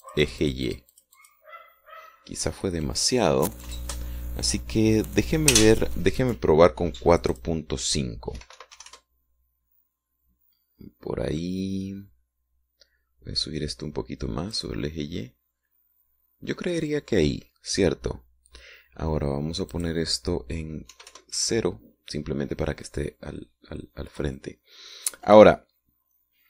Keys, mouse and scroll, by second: 0.6-2.5 drag, 8.3 click, 9.4 KP_4, 9.5 KP_Decimal, 9.7 KP_5, 9.9 KP_Enter, 15.5 click, 20.8 click, 21.9 KP_0, 22.1 KP_Enter.